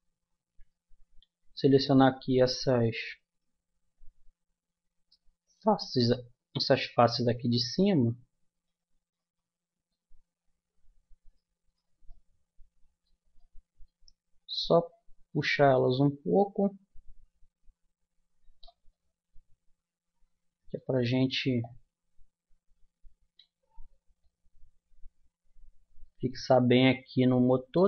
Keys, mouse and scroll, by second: 0.0 Tab, 2.8-5.1 drag, 5.4 click, 5.4-9.9 middle drag, 11.2-13.8 middle drag, 18.9-20.9 middle drag, 21.6-23.4 drag, 23.8 Tab, 24.2 click, 26.0 middle click, 26.8-27.8 middle drag.